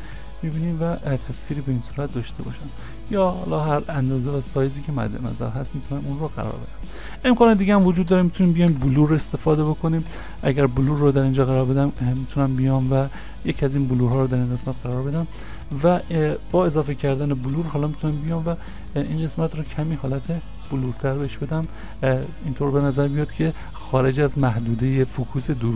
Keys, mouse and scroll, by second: 8.1 s, 8.2 BackSpace, 9.6 u, 10.1 r, 10.9 scroll down 1, 16.7 scroll down 1, 21.6-22.4 scroll down 1, 22.4 scroll up 1, 22.4 middle click.